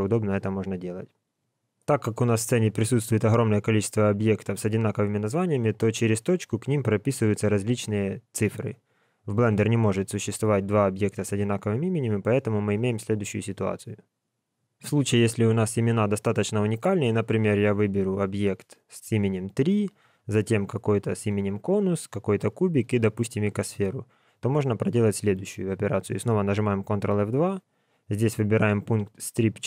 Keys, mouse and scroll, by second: 8.9 scroll up 4, 11.9 scroll down 4, 17.1 click, 20.2 shift+click, 22.0 shift+click, 26.9 ctrl+F2.